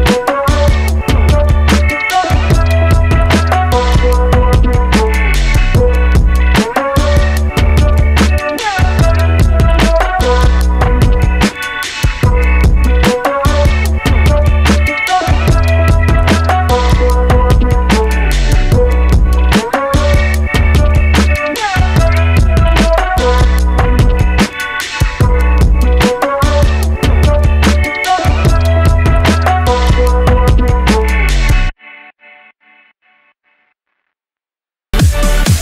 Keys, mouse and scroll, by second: 31.3-33.8 scroll up 5, 33.8 KP_3, 35.3 click.